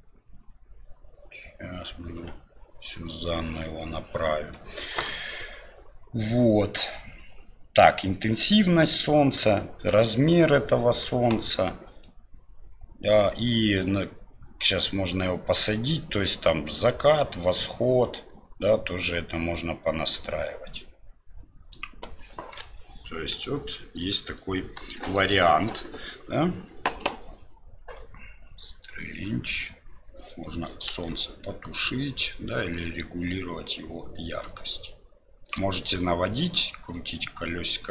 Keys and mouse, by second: 12.1-14.2 drag, 15.4-21.8 drag, 24.9 shift+middle click, 27.9-31.3 drag, 31.7-33.1 shift+drag, 33.3-35.5 shift+drag.